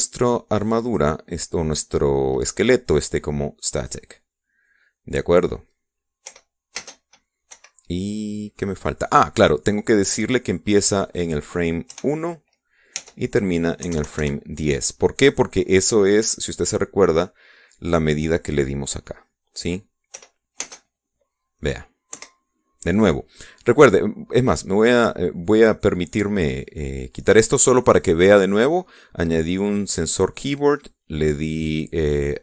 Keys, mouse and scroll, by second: 0.1 right click, 1.9 click, 4.8 click, 7.3 p, 7.8 space, 8.6 Escape, 12.1 click, 12.9 KP_1, 14.0 Tab, 14.9 KP_1, 15.0 KP_0, 15.2 KP_Enter, 21.2 p, 21.6 space, 23.2 Escape, 27.3-28.9 drag.